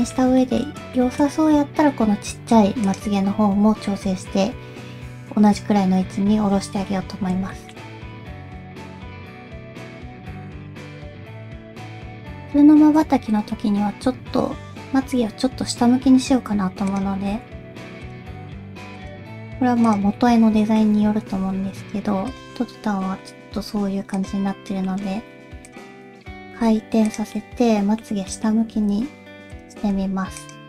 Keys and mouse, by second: 0.4 middle click, 1.0 shift+middle click, 3.7 KP_5, 6.3 KP_1, 7.5 shift+middle click, 8.1 Tab, 8.6 ctrl+z, 9.2 g, 11.9 middle click, 13.5-14.7 middle drag, 14.7 KP_3, 15.5 r, 17.3 g, 18.4 r, 19.4 g, 20.2 middle click, 21.2 r, 22.6 middle click, 23.5 g, 24.5 middle click, 25.2 r, 25.9 middle click, 26.4 g, 27.3 middle click, 28.3 middle click, 28.7 r, 29.8 g.